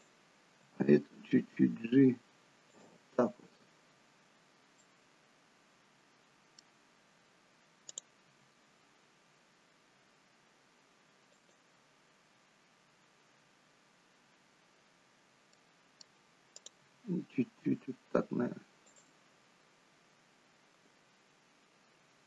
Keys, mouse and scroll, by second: 0.5 g, 4.4-4.8 scroll up 1, 4.8 middle click, 8.2 click, 8.2 g, 12.3-14.0 scroll down 1, 15.5 middle click, 16.6 click, 16.8 g.